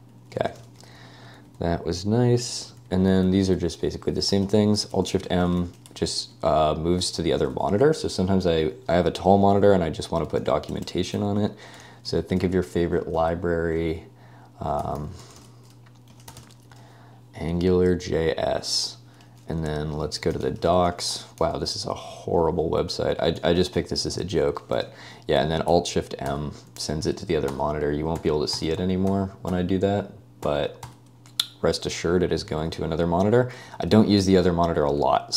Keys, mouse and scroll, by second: 0.3-6.4 typing, 10.2-10.9 typing, 11.9 super+1, 12.1 super+w, 14.5-18.3 typing, 19.8-24.0 typing, 26.3 â, 27.5-30.5 typing, 33.8 å.